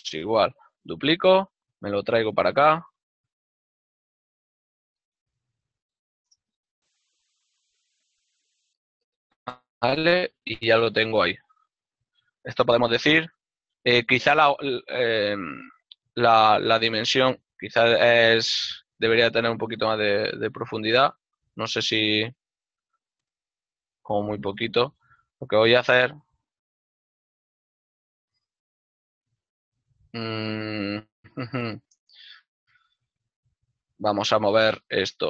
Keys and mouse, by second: 0.7 shift+d, 2.6 g, 3.7 ctrl+click, 3.9 g, 4.3 x, 4.7 KP_0, 13.2 shift+middle click, 16.3 ctrl+middle click, 17.5 right click, 23.7 right click, 24.7 l, 35.0 y.